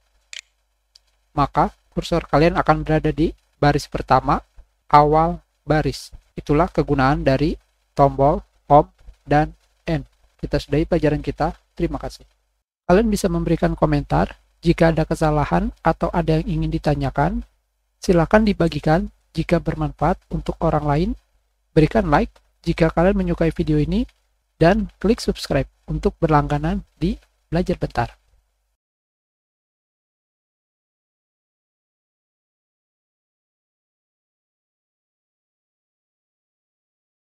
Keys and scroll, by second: 0.2 ctrl+Home.